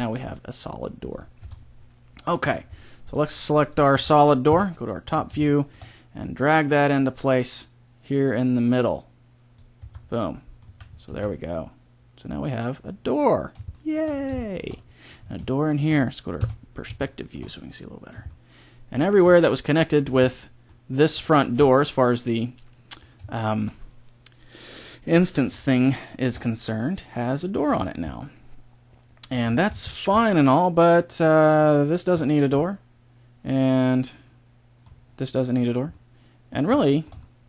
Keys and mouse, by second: 0.2 middle click, 0.7 middle click, 0.8 click, 1.3 Tab, 2.4 a, 3.9 ctrl+l, 4.5 KP_7, 6.4-7.6 middle drag, 7.9 click, 9.8 Tab, 10.6 z, 11.1 z, 16.3 KP_5, 29.6 middle click, 32.1 middle click, 33.7 middle click, 35.9 middle click.